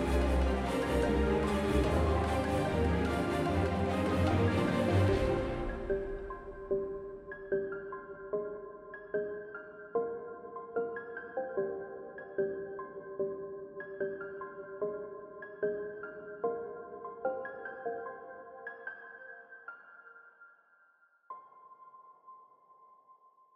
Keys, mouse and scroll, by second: 2.6 Tab, 5.1-5.5 right drag, 5.5 t, 6.7 right drag, 6.7 t, 7.1 a, 13.8 Tab, 17.2 i, 18.4 e.